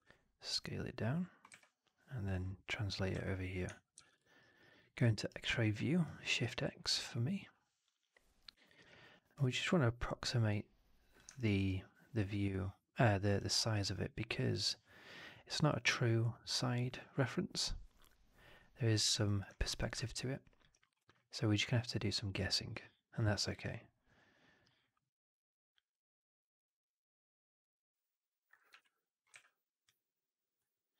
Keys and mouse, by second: 1.4 w, 2.1 click, 3.0 f, 3.8 shift+x, 4.3 alt+right drag, 4.5 alt+right drag, 4.7-5.1 alt+middle drag, 5.2 alt+right drag, 5.9-6.3 alt+right drag, 6.8 r, 8.7 w, 9.3 click, 10.4 click, 11.3 alt+drag, 11.5 alt+drag, 12.0-13.2 alt+middle drag, 13.3-13.6 alt+right drag, 25.8-28.4 drag, 28.6 r, 29.2 w, 29.7 click.